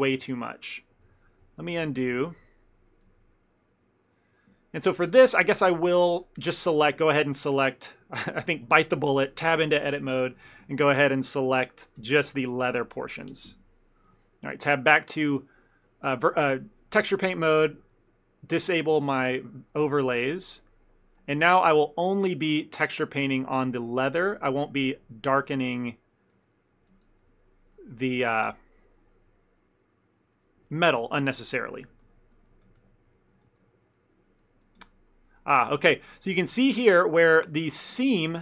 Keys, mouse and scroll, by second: 0.6 ctrl+z, 1.2 ctrl+z, 1.4 ctrl+z, 2.1 ctrl+z, 2.2 ctrl+z, 3.0-4.3 ctrl+z, 4.7 ctrl+middle click, 4.9 ctrl+middle click, 5.1 middle click, 5.3 middle click, 5.6 ctrl+middle click, 6.9 Tab, 8.7 click, 10.4 3, 10.8 alt+click, 11.5 alt+shift+click, 11.8 middle click, 12.6 alt+shift+click, 13.3 ctrl+KP_Add, 13.6 ctrl+KP_Add, 14.7 Tab, 18.4 click, 19.0 f, 19.9 f, 20.5 click, 20.9 click, 21.4 click, 21.9 ctrl+click, 21.9 ctrl+click, 22.2 click, 22.9 ctrl+click, 23.1 click, 23.5 ctrl+click, 23.6 middle click, 23.9 ctrl+click, 24.0 ctrl+click, 24.3 ctrl+click, 24.6 middle click, 25.2 ctrl+click, 25.5 ctrl+click, 25.8 ctrl+middle click, 26.4 ctrl+click, 26.6 middle click, 27.0 ctrl+click, 27.1 ctrl+click, 27.4 middle click, 27.8 ctrl+middle click, 28.4 shift+middle click, 30.8 ctrl+middle click, 31.2 ctrl+middle click, 31.3 shift+middle click, 31.7 ctrl+click, 31.9 ctrl+click, 32.4 ctrl+click, 32.4 ctrl+click, 32.6 ctrl+click, 33.1 ctrl+click, 33.2 middle click, 33.5 ctrl+click, 33.7 ctrl+click, 34.0 middle click, 34.5 ctrl+click, 34.7 ctrl+click, 35.4 ctrl+middle click, 35.6 middle click, 36.0 middle click, 36.3 ctrl+middle click, 37.0 ctrl+middle click, 37.5 shift+middle click, 37.7 ctrl+middle click, 38.2 ctrl+middle click, 38.2-38.4 shift+middle click.